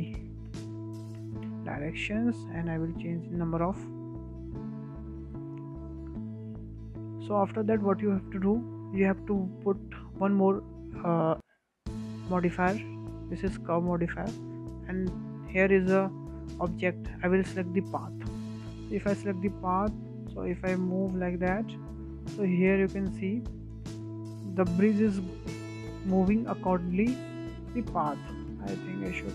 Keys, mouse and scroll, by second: 4.1-5.2 drag, 5.2-6.0 scroll down 11, 6.0-7.7 scroll up 8, 7.7 shift+middle drag, 7.9-8.3 scroll up 2, 8.3-10.8 shift+middle drag, 10.8-13.7 drag, 13.8-15.1 scroll down 2, 15.1-18.1 drag, 19.3 scroll down 4, 19.7 shift+middle drag, 20.0-20.5 scroll up 1, 20.5 w, 21.3 click, 24.7-25.0 scroll up 1, 25.0-25.6 middle drag, 25.6-25.9 scroll up 4, 25.9-26.8 shift+middle drag, 26.8-27.1 scroll down 1, 27.1-27.5 shift+middle drag, 27.5-27.8 scroll down 4, 27.8-28.1 middle drag, 28.1-28.4 scroll up 3, 28.4-29.3 shift+middle drag.